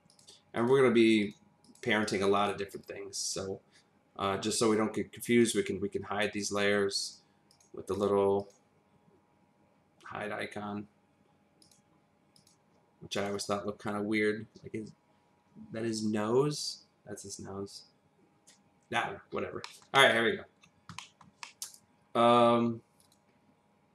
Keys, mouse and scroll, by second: 0.1 click, 0.6 click, 1.6 click, 2.3 click, 2.7 click, 3.2 click, 5.4 click, 7.0 click, 7.5 click, 7.9 click, 8.4 click, 11.6 click, 12.3 click, 13.1 click, 19.6 middle click, 19.9 double middle click, 20.5-20.9 scroll down 1, 20.9 middle click, 21.4 middle click, 23.0 click.